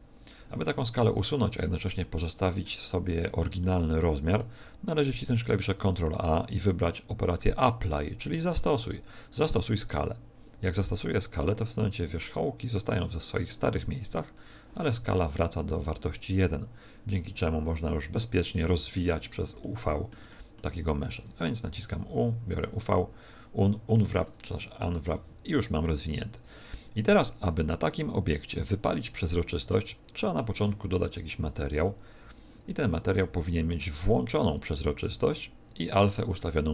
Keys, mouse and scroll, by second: 1.0 middle click, 2.1 middle click, 2.9 middle click, 3.5 shift+middle click, 5.4 ctrl+a, 18.7 n, 19.5 shift+middle click, 20.3 middle click, 20.6 Tab, 21.6 u, 23.5 scroll down 2, 24.2-25.1 scroll up 4, 25.1 Tab, 25.7-26.1 scroll down 1, 27.2 middle click, 28.6 middle click, 29.7 middle click, 31.4 click, 32.3 click, 34.4 click, 35.9 click.